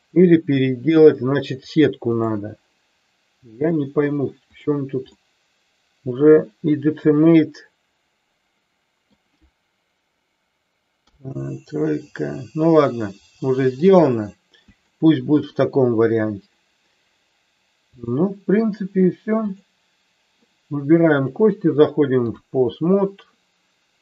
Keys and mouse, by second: 1.6 click, 5.2-9.1 middle drag, 11.0 KP_3, 13.9 click, 14.9 shift+middle click, 18.0 click, 19.5 click, 21.1-22.4 drag.